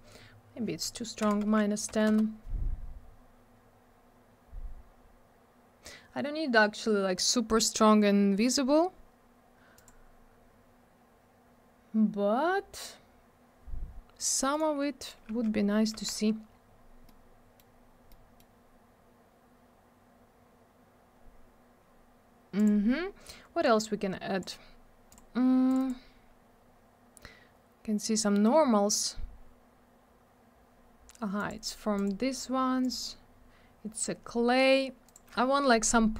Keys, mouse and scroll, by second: 1.9 0, 2.0 Return, 3.4-4.6 scroll up 1, 4.7-6.0 scroll down 1, 7.7 scroll up 1, 8.3 scroll down 1, 9.7 click, 12.4-12.8 scroll up 1, 14.5 right click, 15.0 right click, 15.5-15.8 scroll up 1, 16.2 scroll up 1, 17.0 middle click, 17.7 scroll down 1, 18.1 middle click, 20.1-21.3 scroll down 1, 22.5 click.